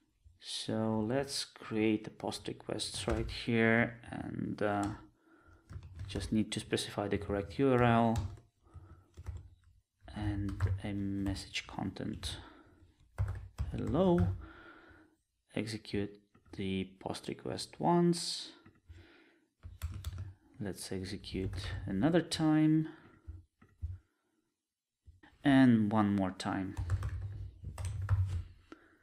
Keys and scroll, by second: 3.1 ctrl+space, 7.3 Return, 20.0 alt+shift+Left.